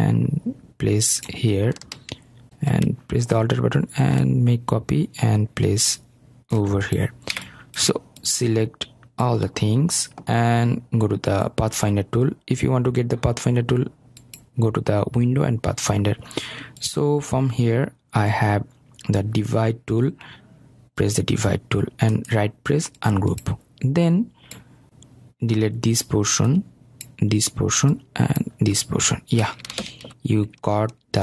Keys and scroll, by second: 26.0 Delete.